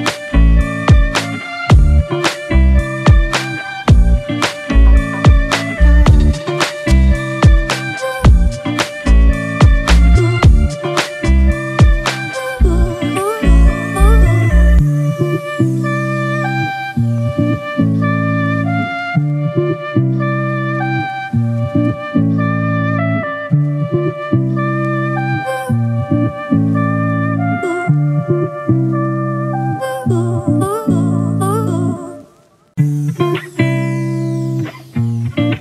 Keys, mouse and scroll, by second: 0.0 ctrl+t, 2.8 ctrl+t, 3.1 alt+shift+click, 6.4 Right, 6.6 Right, 7.0 Left, 7.2 Left, 7.4 Right, 7.6 Right, 10.9 Return, 13.6 Right, 14.0 Right, 15.2 Up, 15.8 Down, 16.5 Down, 27.2 alt+right click, 30.1 alt+click.